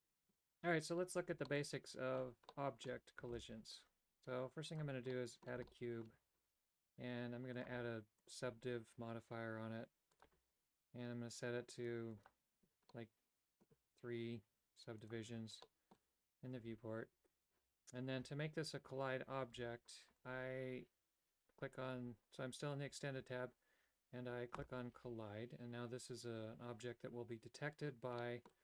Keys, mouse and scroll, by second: 3.6 shift+a, 5.2 middle click, 5.7 shift+middle click, 7.6 click, 8.3-10.3 drag, 11.9 click, 12.2 click, 13.0 middle click, 15.1 click, 15.7 middle click, 19.6 g, 24.6 click, 28.2 middle click.